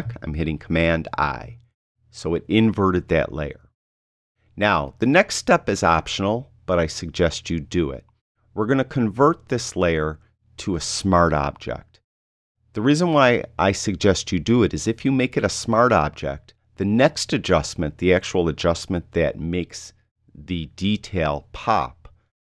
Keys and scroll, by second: 1.2 super+i.